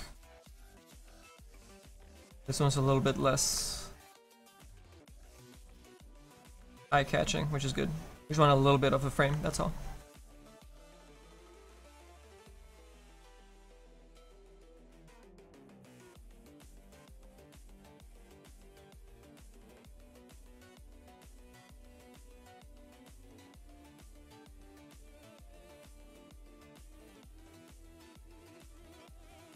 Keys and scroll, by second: 22.2 s.